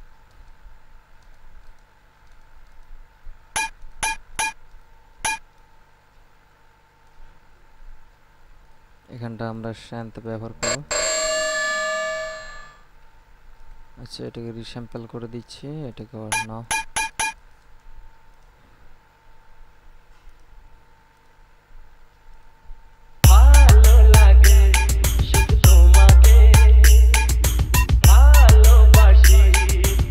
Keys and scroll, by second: 23.4 space.